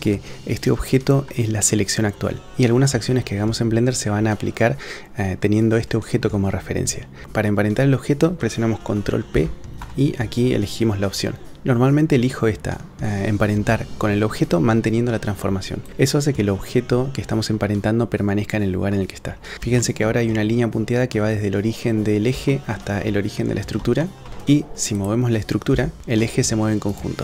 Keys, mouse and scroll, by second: 9.3 ctrl+p, 19.8 shift+click, 22.5 shift+middle drag, 24.0 shift+middle drag, 25.0 click, 25.7 g, 26.0 g.